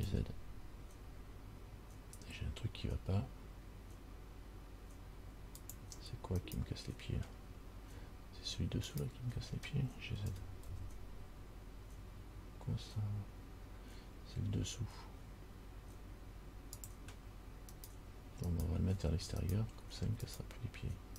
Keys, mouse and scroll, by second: 6.6 right click, 9.1 shift+right click, 10.5 g, 18.0 right click, 18.7 right click, 19.6 shift+right click, 20.5 right click.